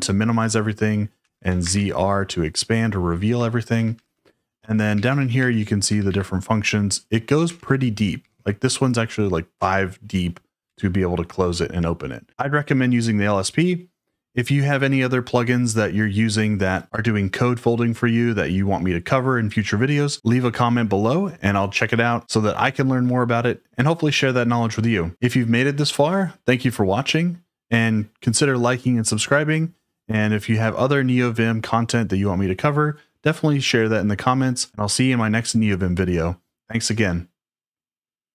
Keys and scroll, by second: 1.2 z, 1.6 shift+r, 3.7 ctrl+d, 3.9 ctrl+d, 4.1 ctrl+d, 4.7-6.4 typing, 7.4-11.1 typing.